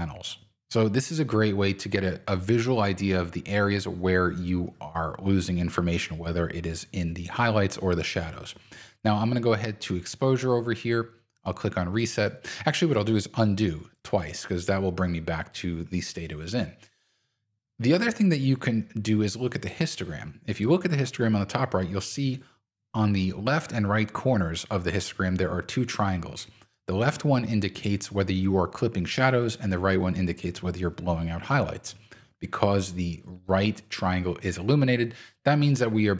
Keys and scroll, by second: 13.3 super+z.